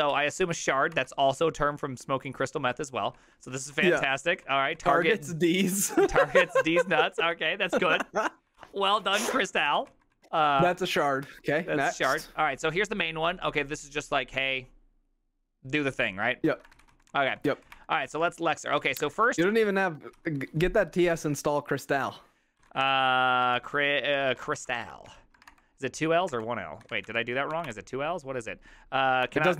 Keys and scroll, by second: 0.2 ctrl+c, 0.3-1.2 typing, 2.7-6.9 typing, 7.4 ctrl+c, 8.6 ctrl+c, 9.4-11.4 typing, 12.1 Return, 16.5-18.2 typing, 19.2 ctrl+c, 19.2-28.2 typing, 29.3-29.5 typing.